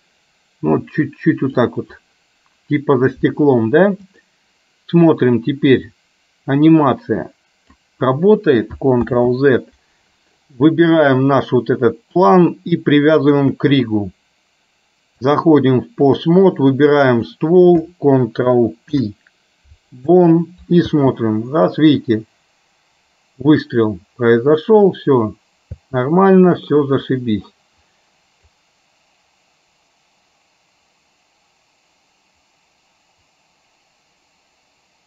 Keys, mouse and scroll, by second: 6.1-8.0 drag, 9.2 ctrl+z, 13.2 shift+click, 15.4 click, 17.1 click, 18.9 ctrl+p, 21.0 space, 25.9 space, 28.7-35.0 drag.